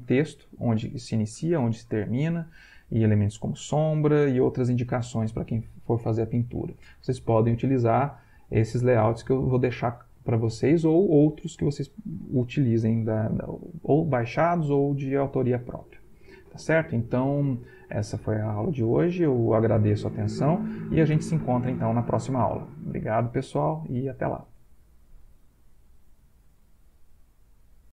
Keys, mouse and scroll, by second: 8.9 Right, 27.9 click.